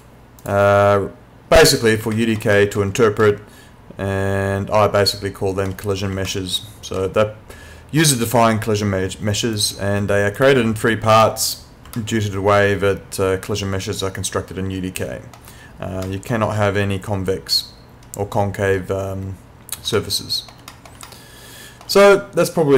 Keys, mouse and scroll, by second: 2.2 alt+middle click, 3.2 alt+middle click, 6.4 alt+middle click, 9.6 click, 12.0 alt+middle click, 16.1 alt+middle click, 20.0 alt+middle click, 21.1 alt+middle click.